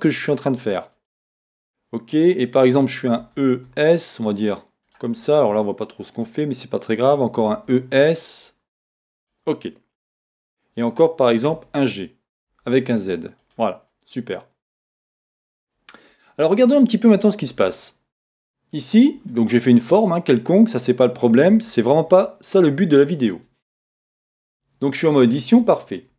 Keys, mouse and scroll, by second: 1.1 click, 3.2 e, 4.9 click, 5.2 middle click, 7.3 e, 9.3 click, 9.9 middle click, 11.5 g, 13.5 click, 13.9 middle click, 17.5 z, 19.3 middle click, 22.1 KP_1, 24.4 Tab.